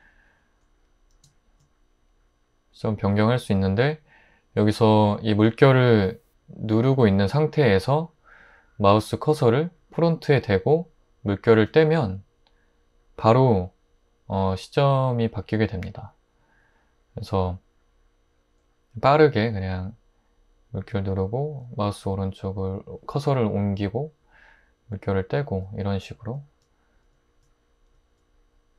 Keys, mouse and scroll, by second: 7.5-9.2 typing, 26.3 click, 27.1 click, 27.9 click.